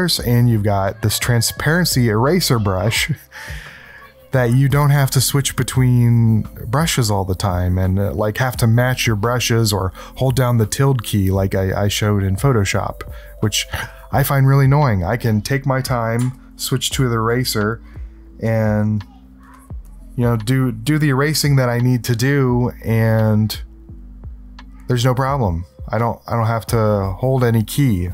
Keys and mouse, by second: 16.3 ctrl+alt+click, 17.7 click, 18.3 click, 18.8 click, 19.5 click, 19.8-22.6 drag.